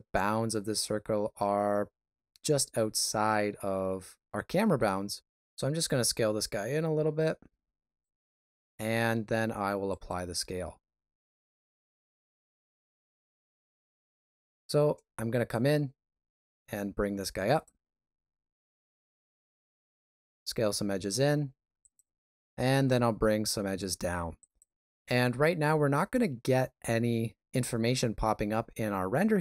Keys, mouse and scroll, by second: 5.4 s, 8.9 ctrl+a, 11.6 shift+z, 12.8 ctrl+middle click, 13.9 shift+middle click, 14.5 Tab, 16.2 2, 16.2 e, 18.4 e, 22.6 e.